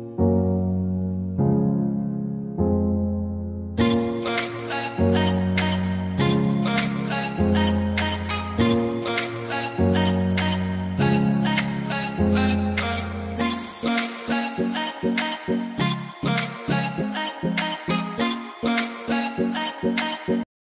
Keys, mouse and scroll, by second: 4.8 click, 5.6 scroll down 1, 6.4 click, 10.9 scroll down 1, 12.0 click, 14.3 scroll down 1, 15.6 click.